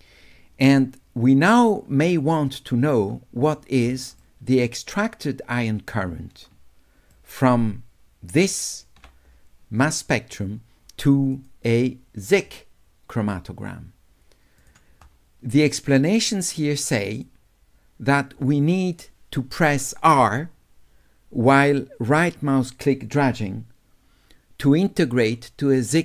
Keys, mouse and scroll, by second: 4.3 shift+right click, 4.6 shift+click, 5.4 shift+right click, 7.2-8.4 shift+drag, 11.4 click, 14.6 click, 17.2 click.